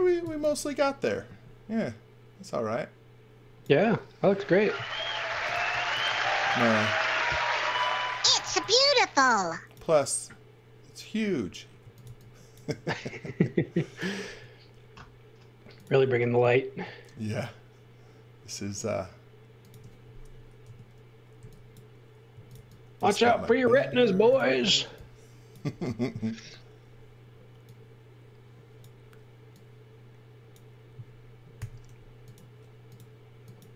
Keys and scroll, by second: 0.0-0.7 typing, 5.0-6.0 typing, 8.0-8.9 typing, 11.5-12.7 typing, 14.2 m, 20.6-23.0 typing, 24.1 space, 31.6 g, 31.8 m.